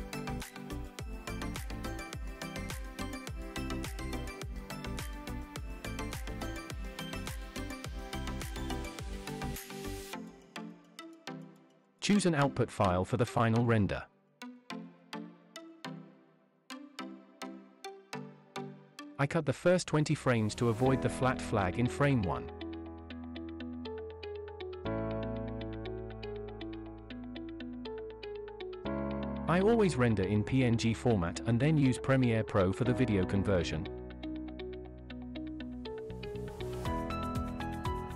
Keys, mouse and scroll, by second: 1.5 click, 2.7 click, 10.7 click, 20.8-22.8 drag, 24.4 click, 29.4-30.5 scroll down 4, 33.1 click, 34.5-35.5 scroll down 6, 35.8-36.7 scroll up 2, 36.7-38.1 scroll up 2.